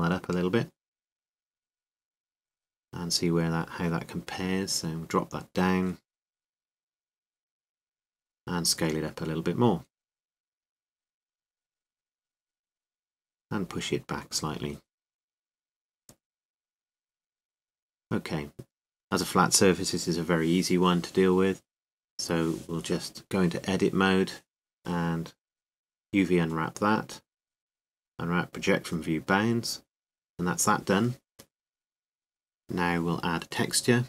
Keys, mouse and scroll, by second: 0.6 s, 3.9 click, 4.1 click, 4.8-6.6 middle drag, 7.0-9.5 drag, 10.3-12.1 middle drag, 12.1-12.8 scroll up 1, 12.8-13.4 scroll up 1, 13.4 s, 13.6 scroll up 1, 14.9-16.2 drag, 16.2-17.2 middle drag, 17.2 right click, 17.8-18.9 drag, 18.1 s, 18.9 middle click, 19.4-21.7 drag, 22.3 KP_7, 23.9 Tab, 25.2 a, 25.7 a, 27.3-29.3 drag, 33.2 Tab.